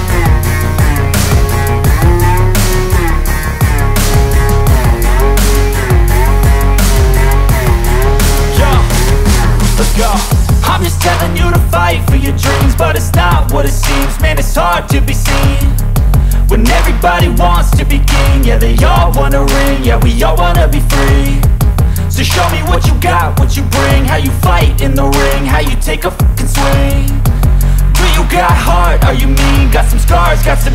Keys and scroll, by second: 9.9 Escape, 12.0 F2, 14.0 F3, 14.6 Escape.